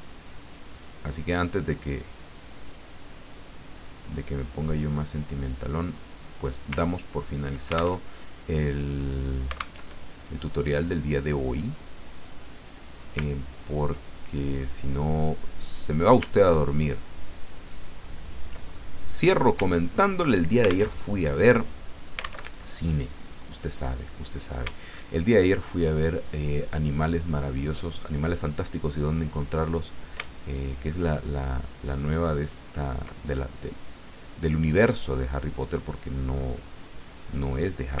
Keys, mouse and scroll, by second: 1.8-4.9 drag, 6.2 click, 6.8-7.3 ctrl+scroll up 2, 8.0 ctrl+alt+Tab, 9.8 alt+Tab, 10.7-11.9 drag, 13.2 ctrl+click, 15.6 click, 16.6-18.5 ctrl+drag, 18.8 ctrl+middle click, 19.6-20.1 ctrl+scroll down 1, 20.9 alt+Tab, 22.4 alt+Tab, 24.7-25.1 ctrl+scroll up 1, 27.0 click, 28.1 click, 29.5-32.2 drag, 32.8-34.6 ctrl+drag, 35.7 click, 37.0-38.0 drag.